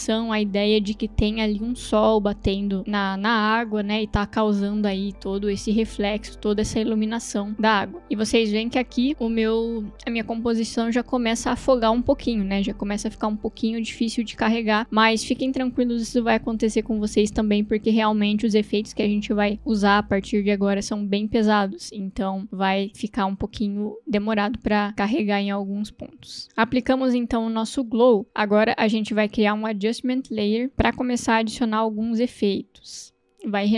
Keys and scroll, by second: 26.4 space, 33.2 ctrl+alt+y, 33.5 Return.